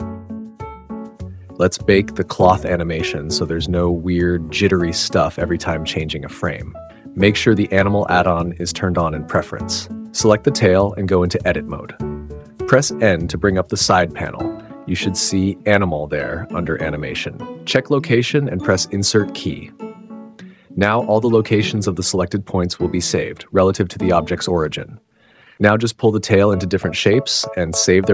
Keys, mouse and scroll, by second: 2.1 click, 5.2 click, 6.6 click, 9.5 Tab, 11.6 n, 17.9 click, 19.4 a, 20.4 space, 22.5-24.3 typing, 23.4 click, 25.6 click, 26.4 click, 26.7 click, 27.2 click, 27.5 s, 27.7 z.